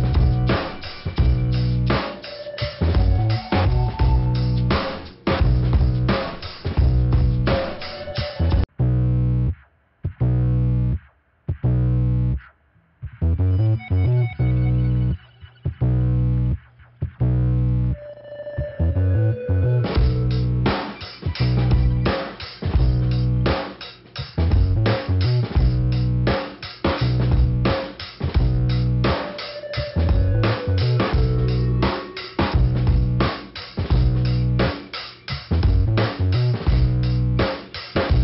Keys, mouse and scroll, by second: 6.2-6.7 scroll down 1, 18.2-18.8 scroll up 1, 19.8 click, 20.6 click, 20.9 click, 22.3 click, 22.5 click, 23.2-24.2 scroll up 2, 24.2 click, 26.0 click, 27.0 click, 27.5 scroll down 2, 28.4 click, 30.9 click, 31.8 click, 31.9 click, 32.5 ,, 33.5 click, 36.4 click, 36.9 click, 37.2 click.